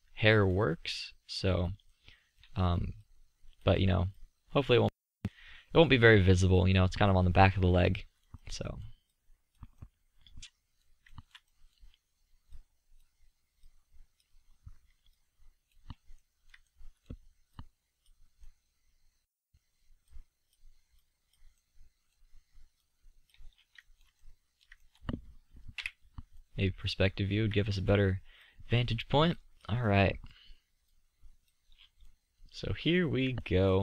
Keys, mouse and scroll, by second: 5.6 middle drag, 8.3-9.3 middle drag, 10.4-10.8 middle drag, 19.0 middle click, 22.0-23.7 middle drag, 25.8 KP_5, 31.6-32.1 middle drag, 32.2-32.9 middle drag.